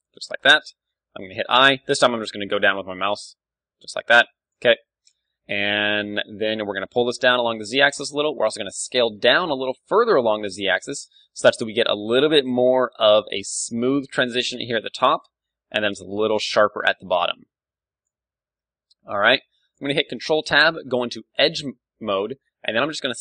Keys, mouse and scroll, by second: 0.2 KP_1, 1.5 i, 4.5-6.3 drag, 6.3-8.0 middle drag, 6.7 g, 8.1-10.7 drag, 8.2 s, 9.6 g, 10.0 KP_1, 10.7-12.6 middle drag, 13.6 d, 13.9-15.7 drag, 16.5 d, 16.6 d, 18.3 right click, 18.3 d, 18.4-20.6 middle drag, 20.0 ctrl+Tab, 22.6 a, 22.9-23.2 middle drag.